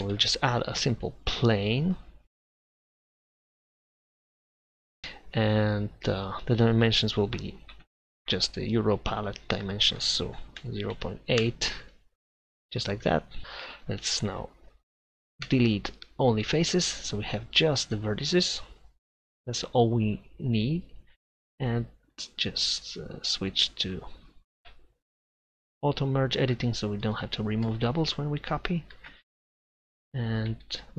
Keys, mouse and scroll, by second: 0.0 Tab, 0.0 Delete, 0.3 shift+a, 3.4-4.8 middle drag, 6.2-9.2 middle drag, 9.8-11.9 middle drag, 13.4 Tab, 15.5 Delete, 20.6 a, 28.9 shift+d.